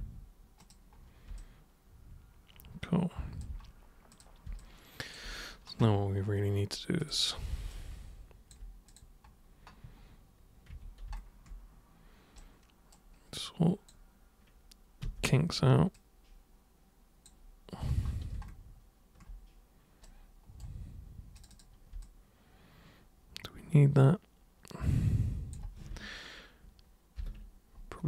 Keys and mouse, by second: 0.0 super+3, 0.6 super+click, 1.4-3.4 alt+super+drag, 4.1 super+click, 4.6 alt+super+click, 7.0 super+click, 7.7 alt+super+click, 8.9 super+click, 10.7 super+1, 12.4 super+right click, 13.3 super+click, 15.0 super+w, 16.0 super+click, 20.0 super+right click, 21.3 super+click, 22.0-25.5 alt+super+drag.